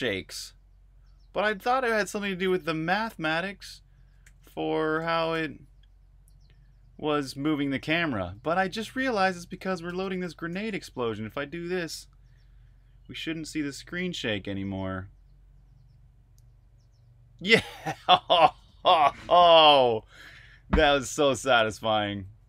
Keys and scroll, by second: 3.9-5.8 typing, 7.2-7.9 typing, 8.3 super+q, 9.3-12.1 typing, 19.7 super+q, 20.4-22.4 typing.